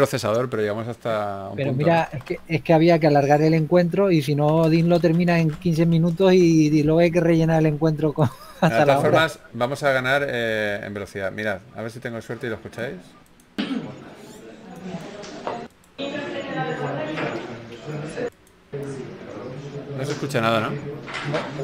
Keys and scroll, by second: 2.2 shift+f, 3.4 typing, 20.5 shift+f.